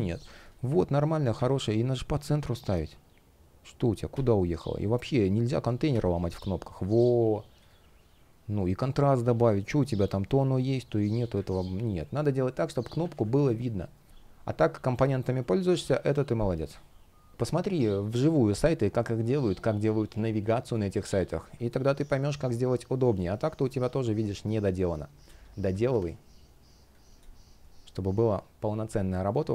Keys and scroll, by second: 11.7 space, 12.8 super+z, 16.0 shift+o, 17.3 space, 21.4 space, 22.9 shift+p, 23.3 space.